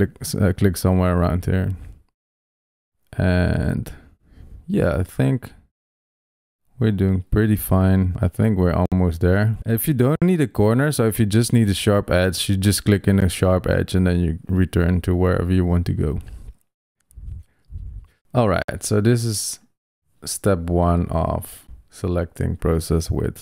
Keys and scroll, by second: 10.0 super+z.